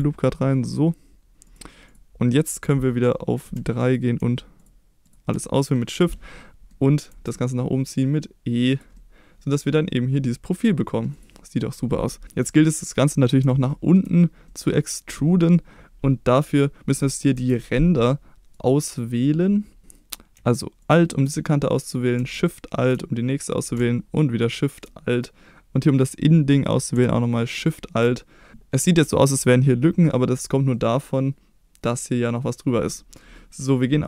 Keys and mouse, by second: 1.4 click, 1.9 click, 3.4 3, 3.8 click, 5.6 middle click, 6.3 middle click, 7.1 e, 8.7 click, 8.9-10.2 middle drag, 11.1 click, 13.6 shift+middle click, 14.4 middle click, 17.4 KP_7, 18.6 right click, 20.8 alt+click, 28.5 KP_7, 30.7-31.9 middle drag, 33.0 middle click.